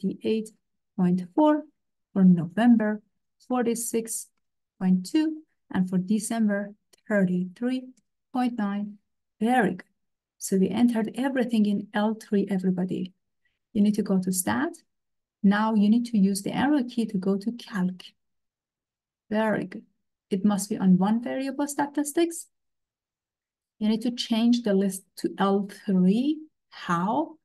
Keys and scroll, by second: 0.5 ., 1.1 4, 1.4 Return, 3.2 4, 3.5 6, 4.4 ., 4.8 2, 5.1 Return, 7.0 3, 7.4 3, 8.0 ., 8.4 9, 8.6 Return, 18.7 Right, 22.7 Return.